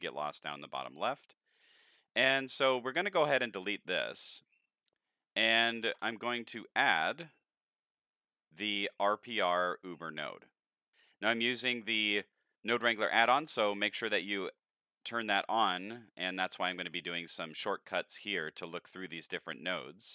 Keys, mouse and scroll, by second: 1.9-2.5 middle drag, 3.1 click, 4.7 x, 5.4 middle drag, 5.9 shift+a, 12.0 ctrl+shift+click, 14.6 scroll up 3, 15.0 middle drag, 15.5 scroll up 3, 15.9 middle click, 17.0 ctrl+shift+click, 18.4 middle click, 19.7-20.1 drag.